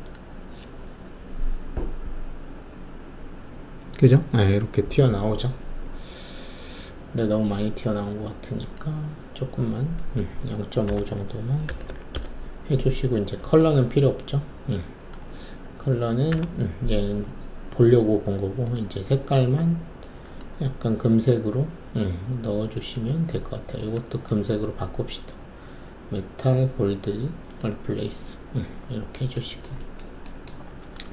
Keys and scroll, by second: 10.8-11.8 typing, 12.1 Return, 16.3 Delete.